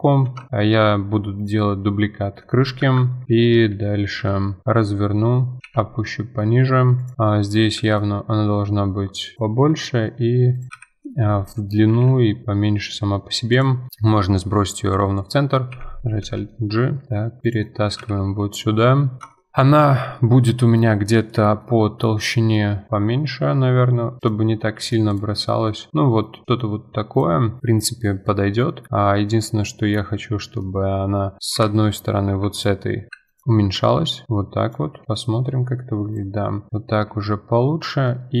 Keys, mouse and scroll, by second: 0.2 shift+d, 1.7-2.8 middle drag, 2.8 F2, 3.2 KP_3, 4.0 r, 7.1-7.8 middle drag, 7.8 s, 10.7 KP_1, 11.9 g, 13.9-15.5 middle drag, 15.5 alt+g, 16.2 g, 18.0 KP_1, 18.9-19.3 scroll up 8, 19.3-20.6 shift+middle drag, 20.6-21.0 scroll down 6, 21.3-21.8 middle drag, 21.8 scroll up 4, 22.0-22.7 middle drag, 22.7 scroll down 1, 22.9 middle click, 22.9 s, 24.5 middle click, 25.1 click, 25.3-25.8 middle drag, 25.8 scroll down 2, 25.9-27.1 scroll up 6, 26.0-26.4 middle drag, 26.4-26.8 middle drag, 27.1 click, 27.6-28.3 middle drag, 28.3-28.7 scroll down 1, 28.7-29.7 middle drag, 29.7-30.4 scroll down 6, 30.4-30.8 middle drag, 30.8-31.2 scroll up 9, 31.4 middle click, 31.5 KP_Divide, 32.3 3, 32.5 click, 33.4 middle click, 33.6 s, 35.0 KP_Divide, 35.2-35.6 middle drag, 35.6-36.1 scroll down 1, 36.1 click, 36.3-36.9 middle drag, 36.9-37.2 scroll down 2, 37.2-37.5 middle drag, 37.5-38.1 scroll down 6, 38.1-38.4 middle drag.